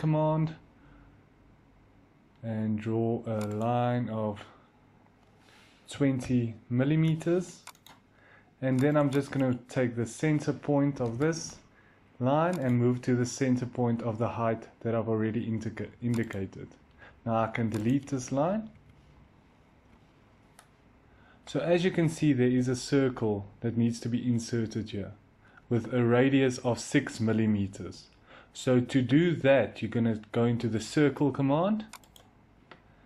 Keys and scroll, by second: 0.0 l, 5.6-6.6 typing, 6.8 Return, 10.8 m, 18.6 Delete, 19.6 Delete.